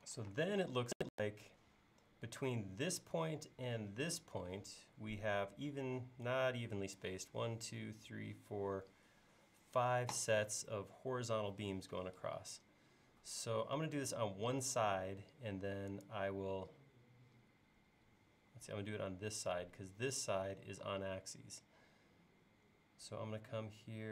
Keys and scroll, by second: 0.4 space, 13.9 l, 18.5 l.